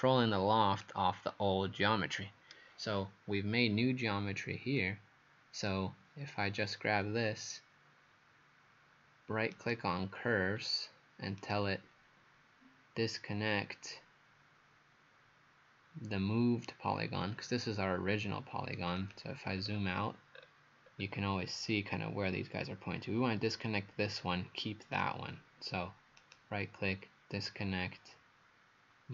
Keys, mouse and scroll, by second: 9.5 right click, 10.6 scroll up 2, 11.4 right click, 19.0 click, 19.5-20.2 scroll down 5, 20.4-20.9 scroll up 1, 20.9 scroll down 1, 21.0-21.7 scroll down 1, 26.2 right click.